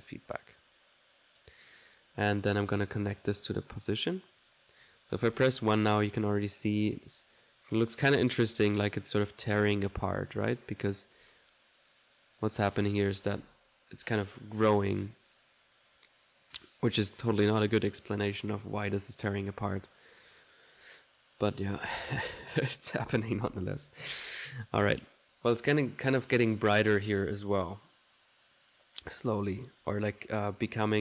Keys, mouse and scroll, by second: 0.7 click, 1.5 click, 2.7-3.7 drag, 3.7-4.8 drag, 4.9 click, 5.3 1, 6.4 click, 8.0 click, 10.9 middle click, 11.3 click, 16.0 click, 19.5 click, 21.5 click, 21.9 1, 25.0 1, 26.6 click.